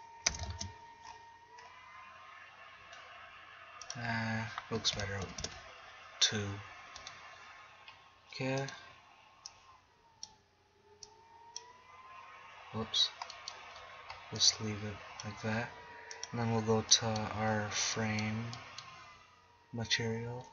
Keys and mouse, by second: 0.3 KP_0, 0.5 shift+z, 7.0-8.6 right drag, 9.5-10.0 middle drag, 11.1-11.5 right drag.